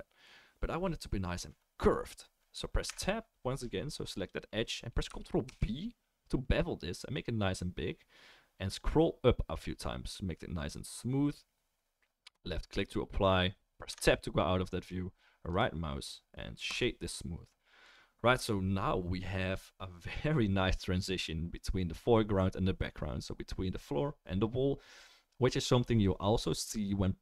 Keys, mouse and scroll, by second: 2.9 Tab, 4.1 click, 5.4 ctrl+b, 8.7-27.2 right drag, 13.9 Tab.